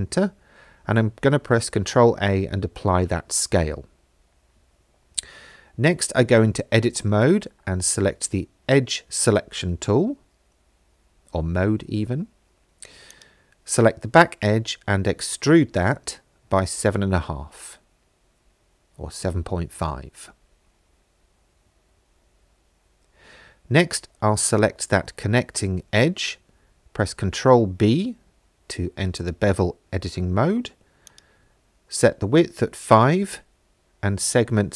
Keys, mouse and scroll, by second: 0.7 middle click, 1.8 shift+middle click, 3.6 Tab, 5.1 2, 13.1 click, 15.0 e, 16.2 z, 17.2 KP_7, 17.7 KP_Decimal, 18.0 KP_5, 18.9 KP_Enter, 21.0 shift+middle click, 23.0 middle click, 24.5 click, 26.0 ctrl+b, 29.2 click, 31.2-34.7 drag.